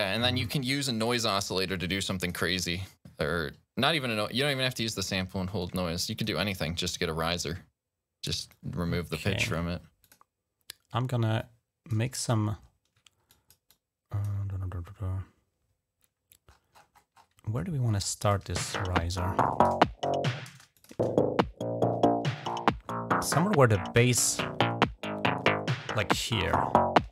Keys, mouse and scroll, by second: 2.0 click, 5.4 click, 8.3 click, 9.9 click, 11.2 click, 12.2-12.7 scroll down 3, 13.2 click, 13.5 click, 14.4 scroll up 2, 16.3-17.5 scroll up 7, 18.1 click, 18.3 space, 19.1-19.8 scroll down 2, 19.9-20.2 scroll up 1, 20.3 space, 20.6 click, 20.8 space, 22.3 scroll up 2, 22.7-23.5 scroll down 4, 25.2-25.7 scroll down 2, 26.8 d.